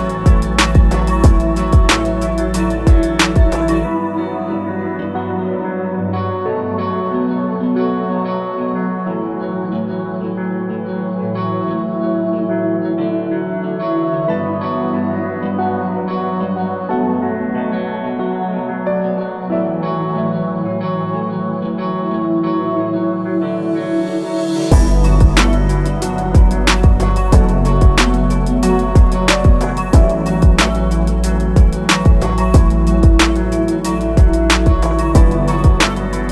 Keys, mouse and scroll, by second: 16.2 click, 17.6 alt+click, 18.9 click, 19.9 right click, 23.8 alt+click, 24.7 right click, 27.7 click, 30.7 click, 33.6 click, 34.5 right click.